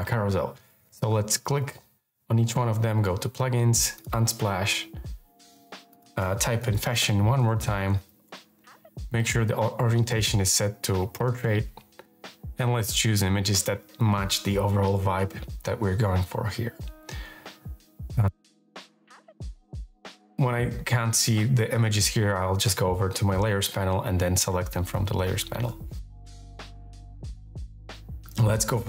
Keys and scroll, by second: 6.0-8.5 typing.